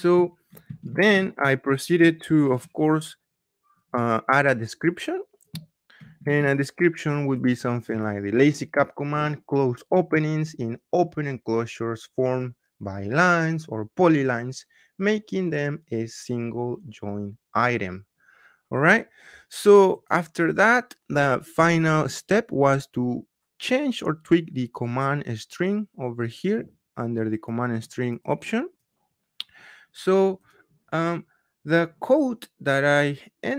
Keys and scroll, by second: 0.8 ctrl+c, 6.1 ctrl+v.